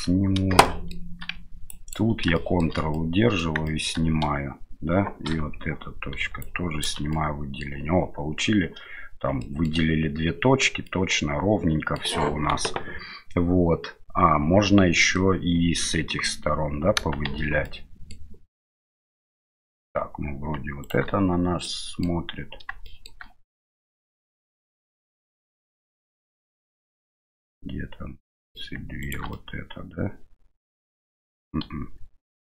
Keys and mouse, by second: 0.6 shift+middle click, 1.8 ctrl+click, 2.3 shift+middle click, 2.9 middle click, 3.6 shift+middle click, 5.3 KP_7, 6.5 ctrl+click, 7.1 middle click, 9.4 shift+middle click, 10.8-11.9 middle drag, 15.1 middle click, 17.3 shift+z, 17.6 middle click, 18.8-19.8 middle drag, 20.8 shift+right click, 21.6 middle click, 22.8 shift+middle click, 23.8 middle click, 25.2-28.5 middle drag, 29.0 shift+right click, 29.3-31.5 middle drag, 31.6 KP_7.